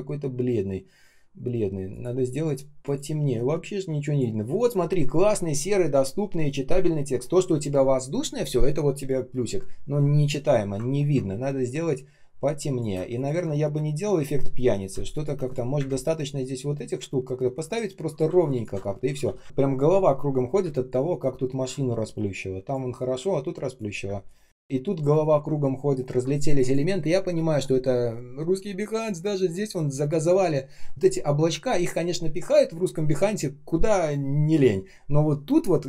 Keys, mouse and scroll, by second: 11.4 space, 11.8 space, 11.9 space, 13.1 ctrl+click, 13.8 ctrl+scroll down 1, 14.8 space, 15.7 Delete, 18.3 alt+click, 19.0 ctrl+z, 20.5 space, 21.0 space, 21.1 space, 25.1-25.9 ctrl+scroll down 1.